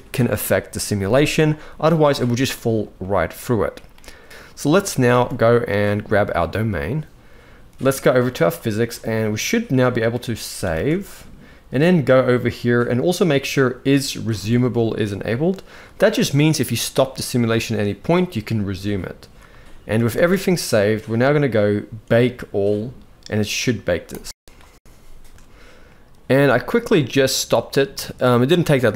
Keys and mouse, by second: 2.7-3.4 middle drag, 4.1 ctrl+s, 4.2 middle click, 4.6 ctrl+s, 4.8 ctrl+s, 6.0 click, 10.2 ctrl+s, 10.5 ctrl+s, 15.0-19.2 drag, 19.7 ctrl+s, 19.9 ctrl+s, 23.9 click, 25.5 middle click, 27.7 z, 28.2-28.9 drag.